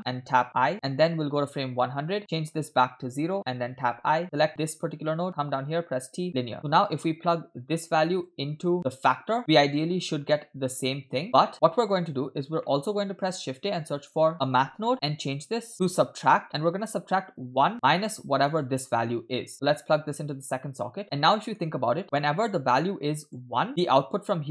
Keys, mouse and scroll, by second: 1.7 i, 1.7 click, 2.3-3.3 drag, 4.2 i, 4.2 click, 5.6 t, 6.6 middle click, 7.3 middle click, 8.3-9.4 drag, 10.1-11.5 drag, 11.6 middle click, 12.6 middle click, 13.3 shift+a, 15.7-16.5 drag, 16.8-17.3 scroll up 2, 17.3 click, 18.5 click, 19.5-20.9 drag, 21.3 middle click, 22.0 click, 23.7 Right.